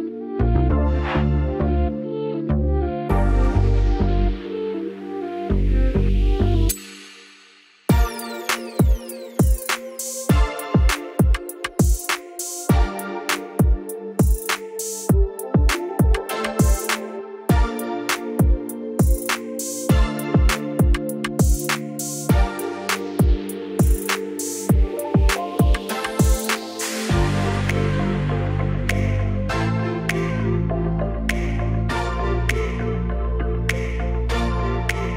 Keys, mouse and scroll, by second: 0.0-0.2 typing, 2.3 click, 2.4-4.1 drag, 3.4-5.5 typing, 11.6 click, 16.7 click, 21.0-24.0 drag, 24.2 click, 24.4 click, 25.0 7, 25.2 Return, 27.7-30.7 drag, 30.3 typing, 30.8 click, 32.1-33.2 typing.